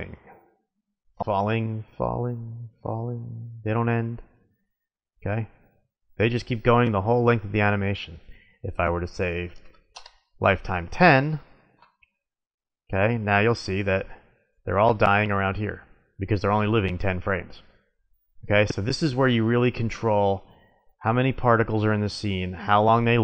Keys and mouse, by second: 4.3-6.1 middle drag, 8.6 click, 10.3-11.6 middle drag, 12.4-13.9 drag, 13.9-15.6 middle drag.